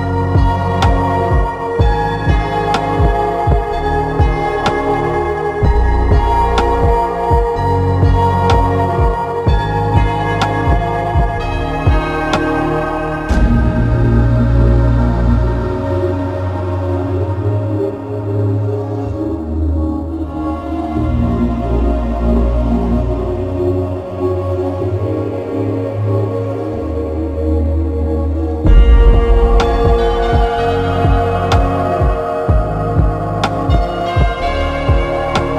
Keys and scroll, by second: 21.6 ctrl+alt+z.